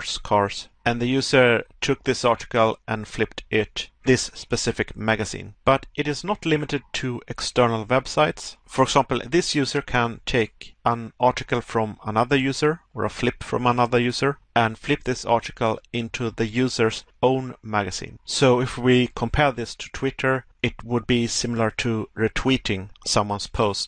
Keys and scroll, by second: 0.4 Pause, 3.4 Pause, 5.5 Pause, 8.4 Pause.